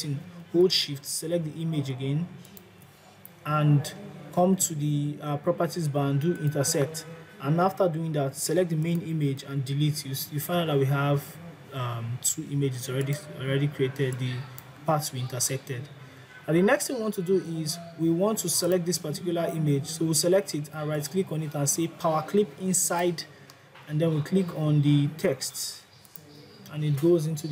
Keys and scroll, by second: 9.7 Delete.